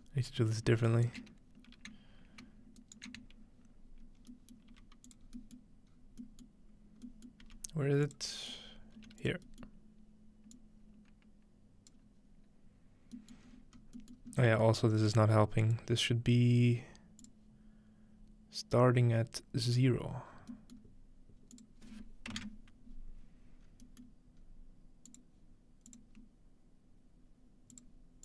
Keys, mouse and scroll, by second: 0.9-1.6 shift+right drag, 1.6-2.8 scroll down 1, 2.8-4.7 ctrl+right drag, 3.5 scroll down 1, 4.4-5.4 middle drag, 4.7 g, 5.1-6.9 drag, 5.3-5.9 scroll down 2, 5.9 scroll up 1, 7.1 scroll up 1, 7.4 g, 8.1-11.9 drag, 8.7-11.3 scroll up 1, 9.0 g, 13.2 middle click, 13.5-15.1 scroll up 3, 15.1-19.0 drag, 15.1-15.8 scroll up 1, 19.6-20.3 drag, 20.3-21.5 scroll down 1, 20.8-23.0 middle drag, 21.5 click, 21.5-22.1 scroll down 1, 23.6-25.9 scroll up 3, 24.1-25.9 middle drag, 25.1-27.8 drag, 25.9 scroll up 1.